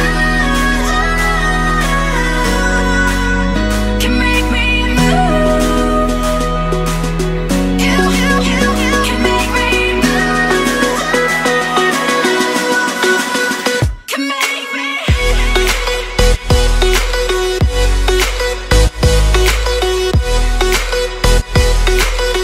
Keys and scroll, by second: 0.5 ctrl+f, 1.0 ctrl+z, 1.2 ctrl+v, 3.4 ctrl+shift+], 9.9 ctrl+z, 13.3 ctrl+-.